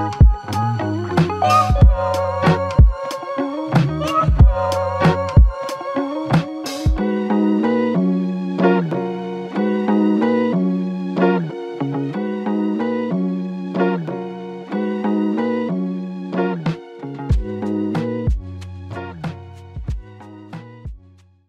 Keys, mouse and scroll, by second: 12.0 double click, 14.7 Tab, 16.7 alt+click.